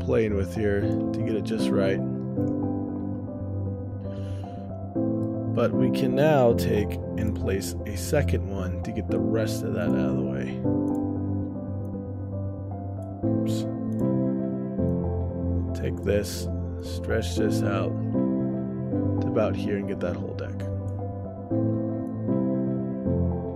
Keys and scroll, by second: 5.8 ctrl+alt+o, 7.1-7.8 typing.